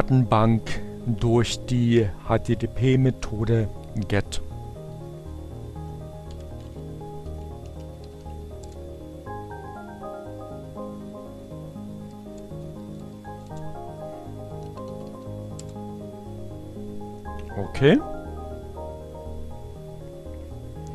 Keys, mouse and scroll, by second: 2.7 Up, 2.9 Left, 4.9 Right, 5.5-8.0 typing, 10.5 Up, 10.6 Left, 10.9 BackSpace, 12.9-14.1 typing, 14.5 Return.